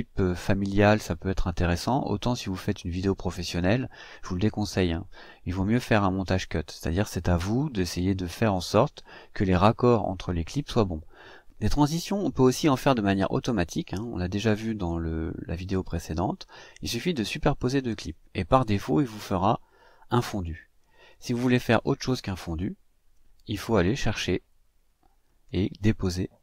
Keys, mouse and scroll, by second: 15.6-16.9 drag, 20.8 click, 22.8 Delete, 25.0-26.4 drag.